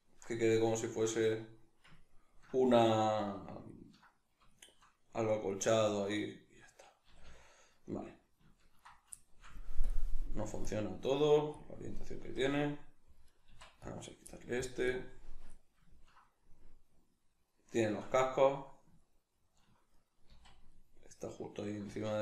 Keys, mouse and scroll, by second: 7.0 a, 9.8-11.9 drag, 11.9-12.2 middle drag, 12.2 a, 12.7-13.3 middle drag, 13.3 right click, 13.5 x, 14.3-14.9 middle drag, 14.9-15.5 drag, 15.5-22.2 middle drag, 20.3 z, 21.9 z.